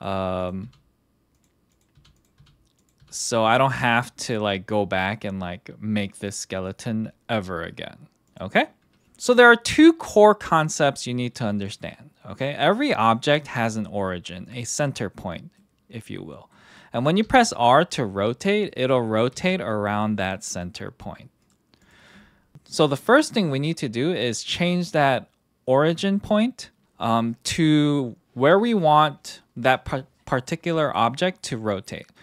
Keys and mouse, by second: 0.0-0.6 typing, 2.0 h, 2.4 h, 3.0 h, 3.2 click, 3.4 h, 8.3 click, 9.0 alt+h, 11.6 click, 15.5-16.5 middle drag, 16.7 middle click, 17.2 r, 18.8 click, 19.0 middle click, 19.3 r, 22.5 KP_1.